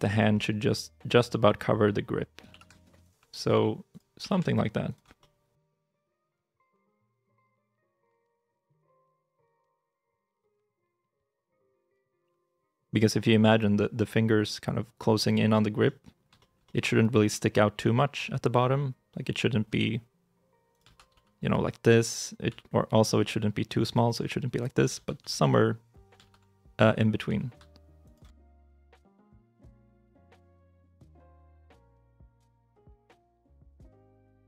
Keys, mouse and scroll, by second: 2.4 g, 2.9 shift+click, 3.2 r, 4.1 g, 4.7 shift+click, 5.1 middle click, 6.1 shift+middle click, 6.1 scroll up 1, 6.3 middle click, 6.6 r, 7.3 y, 7.6 r, 8.8 g, 9.5 shift+middle click, 10.9 scroll up 1, 11.4 middle click, 12.3 g, 12.7 shift+click, 13.4 middle click, 16.2 shift+middle click, 17.2 middle click, 19.6 g, 20.7 ctrl+z, 22.3 s, 24.0 g, 24.8 ctrl+z, 26.1 ctrl+z, 27.1 s, 27.9 shift+click, 28.3 middle click, 29.5 shift+middle click, 29.7 middle click, 30.2 g, 30.7 shift+click, 30.9 scroll down 1, 31.1 middle click, 31.6 r, 32.5 y.